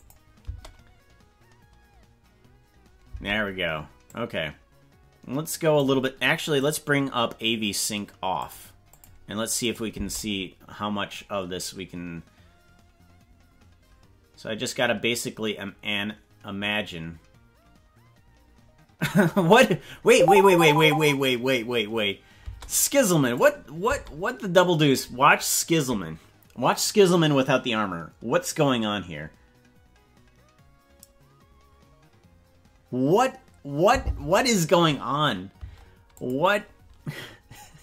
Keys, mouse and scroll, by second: 0.0 click, 0.5 space, 3.2 space, 4.1-5.9 drag, 6.5 click, 9.7 click, 9.9 space, 22.5 space, 23.4 click, 23.8 space, 35.6 space, 36.2 click.